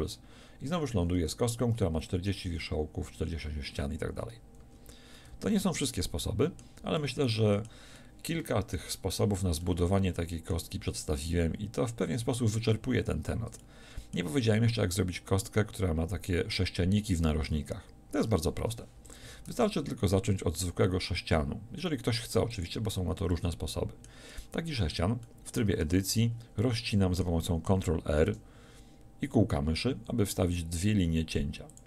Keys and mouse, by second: 4.6 a, 5.1 Tab, 11.7 Tab, 18.2 Tab, 19.0 x, 19.5 shift+a, 25.8 Tab, 28.2 ctrl+r.